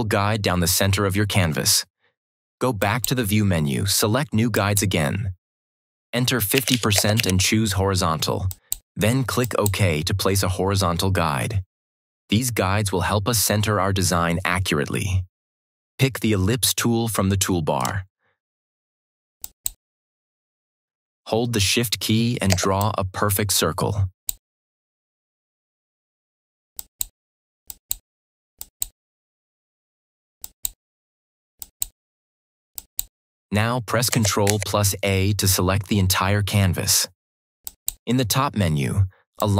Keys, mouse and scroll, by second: 2.7 click, 6.2-7.6 typing, 8.4 click, 17.6 right click, 19.3 click, 22.4 click, 22.7-24.2 shift+drag, 34.4 ctrl+a, 37.5 click.